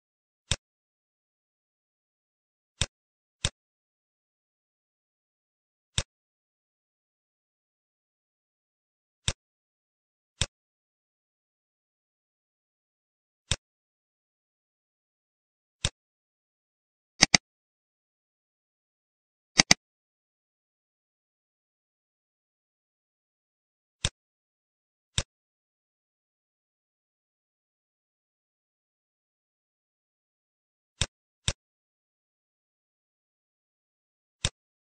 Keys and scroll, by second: 4.5 t, 9.9 z, 15.4 t, 16.1 ctrl+a, 18.2 6, 18.6 Return, 20.8 BackSpace, 22.2 6, 22.5 Return, 26.9 z, 33.1 F1.